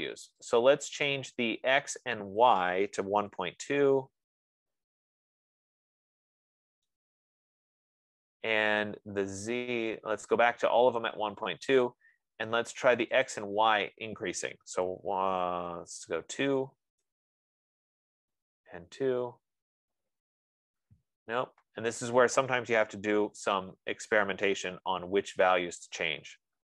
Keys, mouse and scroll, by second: 3.0-4.3 typing, 4.8 Tab, 6.2-6.7 typing, 9.2 Tab, 10.5 typing, 11.4 Tab, 13.8 click, 14.2-17.2 typing, 23.1-25.4 typing, 23.3 click.